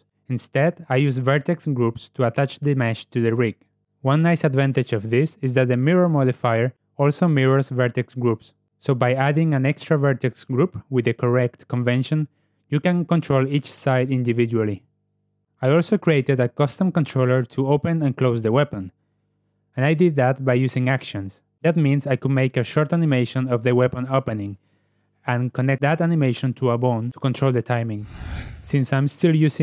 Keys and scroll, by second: 9.3 g, 10.0 Tab, 15.4 ., 16.5 g, 29.4 a.